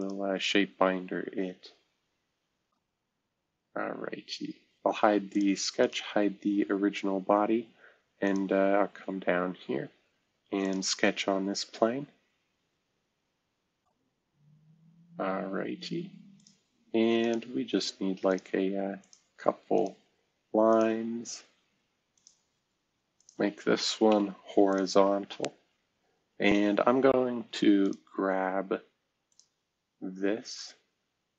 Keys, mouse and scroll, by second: 4.5 space, 5.3 click, 5.8 click, 6.3 space, 8.2 click, 10.6 click, 14.7-16.1 scroll up 2, 22.8 Escape, 24.1 h, 24.7 click, 26.2-27.6 scroll up 1, 27.8 click, 29.2 click, 30.4 click.